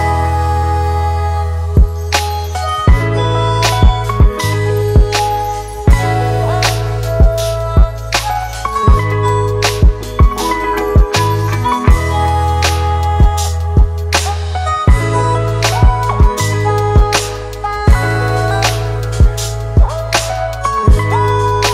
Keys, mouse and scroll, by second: 1.8 ctrl+x, 4.4 ctrl+shift+v, 13.3 Left, 13.5 Left, 14.0 Left, 14.4 Down, 15.1 Down, 15.3 Down, 15.4 Down, 17.5 Right, 17.8 Left.